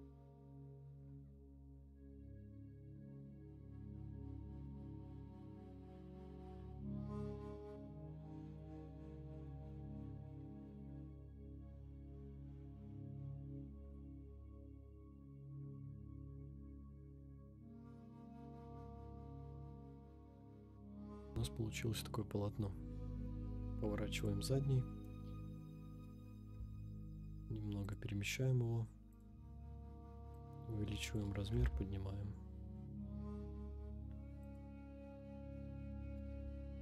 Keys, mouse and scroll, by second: 0.0 middle click, 0.8 click, 1.1-1.7 typing, 1.5 right click, 1.8 scroll up 1, 1.9 scroll down 1, 1.9 scroll down 6, 2.8 click, 3.0 middle click, 3.0 scroll up 1, 3.8 Tab, 3.9 scroll down 2, 4.1-5.2 typing, 4.4 Tab, 4.8 click, 5.4 click, 5.4 Tab, 5.7 middle click, 5.8 scroll down 4, 6.2 click, 6.8 click, 7.0 right click, 7.5 KP_0, 8.0 middle click, 8.2 scroll down 3, 8.2 middle click, 8.5 KP_3, 8.6 scroll up 3, 8.8 shift+middle click, 8.9 click, 9.4-10.1 scroll up 4, 9.6 shift+middle drag, 10.9 g, 10.9 z, 11.4 click, 11.4 scroll down 2, 11.5 scroll up 1, 12.0-12.6 middle drag, 12.6 scroll down 3, 12.7 Tab, 12.8 middle click, 13.1 click, 13.2 scroll down 2, 13.3 middle click, 13.4 scroll up 2, 13.5 ctrl+r, 14.2 click, 14.2 middle click, 14.6 KP_3, 14.8 scroll up 3, 14.9 shift+middle click, 15.3 click, 15.6 scroll up 1, 15.8 g, 15.8 z, 16.7 click, 16.7 g, 16.8 g, 17.5 click, 17.7 ctrl+r, 18.3-18.6 scroll down 3, 18.4 middle click, 18.7 ctrl+r, 19.2 click, 19.4 KP_3, 19.5-19.9 scroll up 6, 19.8 g, 20.3 click, 20.3-20.8 scroll down 7, 20.4 middle click, 20.6 Tab, 20.8 right click, 21.0-21.3 middle drag, 21.3 KP_0, 22.1 scroll down 2, 22.4-23.3 scroll up 2, 23.3 click, 23.3 middle click, 23.3 r, 23.3 z, 24.3 click, 25.1 KP_0, 26.5 g, 28.0 click, 29.1 click, 30.3 click, 31.5 g, 31.6 z, 34.6 click, 35.3 scroll up 2, 36.4 scroll down 1.